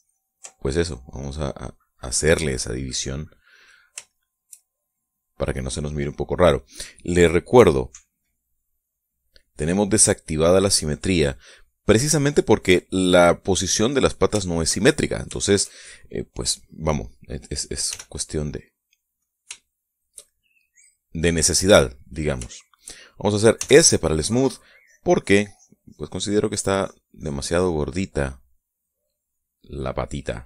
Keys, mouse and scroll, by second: 1.0-4.4 ctrl+middle drag, 4.5-5.6 shift+middle drag, 5.6 click, 8.4-9.9 drag, 11.5-14.8 drag, 14.8 shift+middle click, 14.9-16.2 shift+middle drag, 18.4 f, 19.6 shift+click, 20.1-23.4 shift+middle drag, 24.0 s, 25.2 click, 26.8 click, 28.4-30.4 middle drag.